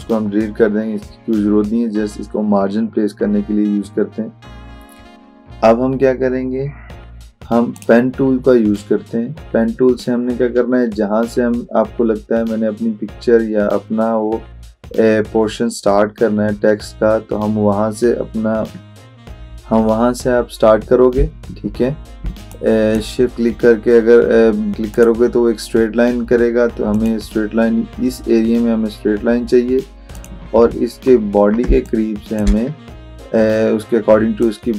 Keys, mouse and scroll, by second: 7.8 click, 10.1 click, 21.2 shift+Num_Lock, 22.6-23.2 shift+drag, 30.2 shift+click, 31.0 alt+scroll up 1, 31.7 space, 31.9 click, 32.2 space, 34.5-34.7 drag.